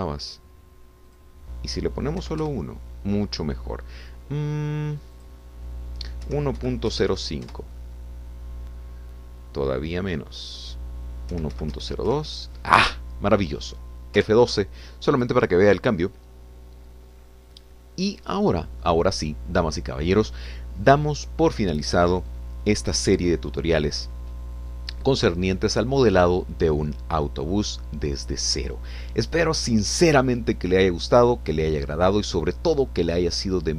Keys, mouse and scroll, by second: 2.1 click, 3.2 1, 3.4 Return, 6.2-7.2 drag, 7.2 1, 7.6 ., 7.9 0, 8.1 5, 8.5 Return, 11.4 click, 12.3 1, 12.5 ., 12.7 0, 12.8 2, 13.1 Return, 14.8 scroll down 2, 15.2 F12.